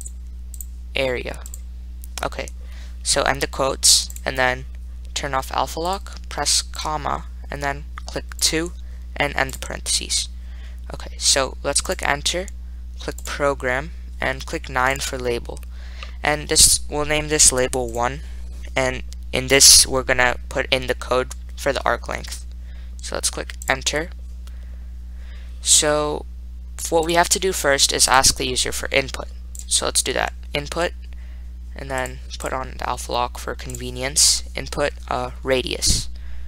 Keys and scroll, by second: 0.4 *, 7.0 ,, 8.6 2, 9.8 ), 12.2 Return, 15.2 9, 18.2 1, 23.9 Return, 28.3 Right, 29.8 1.